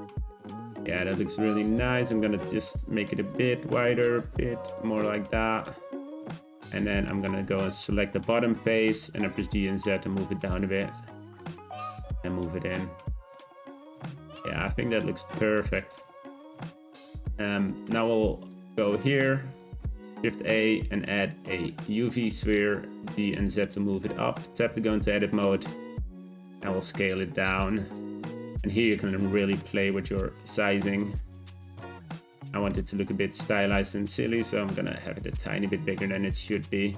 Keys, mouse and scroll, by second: 1.4 click, 1.8 Tab, 2.2 a, 2.3 s, 3.7 s, 5.2 Tab, 5.5 g, 6.3-7.0 middle drag, 7.0 Tab, 7.4 3, 7.7 click, 8.2 middle click, 9.0 g, 10.3 Tab, 10.6 middle click, 10.9 g, 13.3 click, 13.6 scroll down 1, 13.7-15.9 middle drag, 15.9-17.1 scroll down 5, 17.1-18.4 scroll up 2, 18.4 click, 18.8-19.4 shift+middle drag, 19.4 shift+a, 22.4 g, 24.0 Tab, 24.5 a, 24.6 s, 27.7 Tab, 28.5-29.8 middle drag, 29.8 g, 31.3 click, 31.6-33.0 middle drag, 33.0 click, 33.5 Tab, 33.8 a, 33.9 s, 35.7 Tab, 36.3-36.9 middle drag.